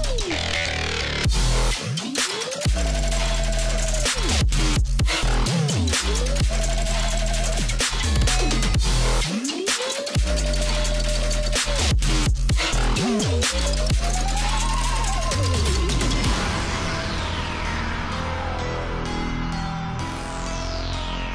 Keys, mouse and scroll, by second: 0.9 click, 1.7 shift+m, 2.3 click, 3.9 alt+scroll up 1, 4.1 space, 4.3 scroll down 2, 4.5 click, 4.8 space, 5.7 a, 6.6 click, 9.8-11.7 drag, 12.7-13.3 alt+scroll down 1, 14.2-14.6 alt+scroll up 1, 15.0 space, 15.2 click, 15.3 space, 15.8 alt+scroll up 1, 16.3 space, 16.4 click, 17.1 alt+scroll up 1, 17.8-21.3 drag.